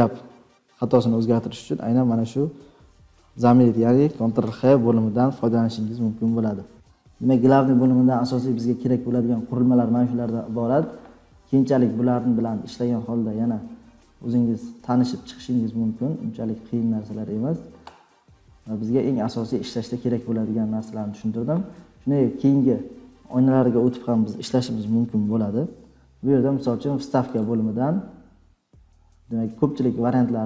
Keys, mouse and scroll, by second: 0.6 scroll, 1.6-2.5 scroll down 10.